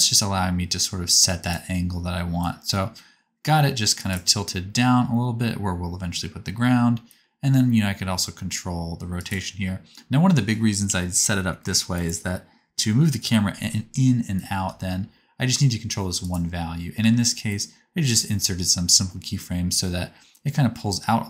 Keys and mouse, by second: 2.4-4.1 drag, 7.1-9.3 drag, 11.9 click, 14.3-16.4 shift+drag, 16.9 space, 19.3-21.2 drag.